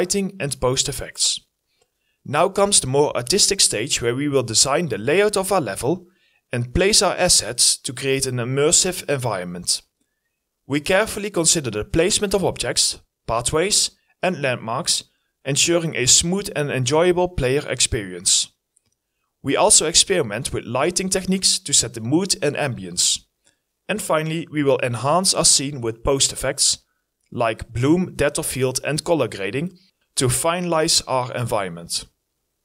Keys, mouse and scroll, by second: 6.3-11.8 typing, 6.4 right click, 6.8 scroll up 1, 8.4 right click, 9.1 scroll down 1, 9.4 scroll up 1, 11.7 right click, 12.6 ctrl+d, 13.2 e, 14.7 w, 15.7 Delete, 16.0 e, 17.5-19.1 typing, 17.8 right click, 23.1 right click, 24.1 right click, 27.3 double click.